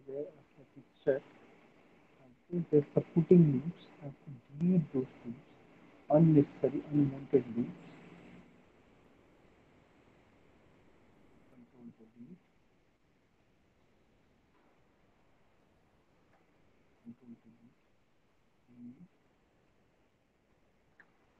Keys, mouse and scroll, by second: 1.5 alt+w, 1.5 click, 3.2 alt+w, 3.6 alt+middle click, 4.0 middle click, 4.2 middle click, 4.4 alt+middle click, 5.0 alt+middle click, 5.4 middle click, 5.6 middle click, 6.3 alt+middle click, 8.1 click, 9.3 click, 9.5 click, 10.3 ctrl+click, 10.5 ctrl+click, 11.1 ctrl+BackSpace, 12.6 alt+middle click, 14.0 click, 14.2 click, 15.3 ctrl+click, 16.5 ctrl+BackSpace, 17.9 alt+middle click, 18.4 middle click, 18.6 middle click, 19.6 alt+middle click, 20.4 click, 21.0 ctrl+BackSpace.